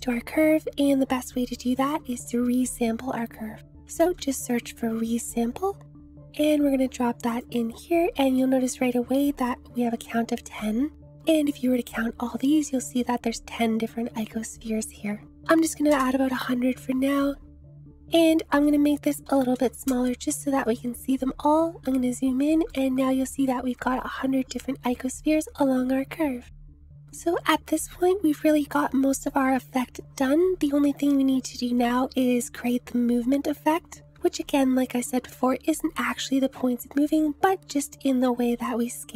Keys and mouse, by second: 1.6 click, 2.1 shift+a, 8.4 click, 15.4 click, 15.6 0, 18.3-20.4 drag, 18.3 0, 22.7-23.5 drag, 26.5-27.0 drag, 28.0-28.5 drag, 32.8 space, 33.9 space.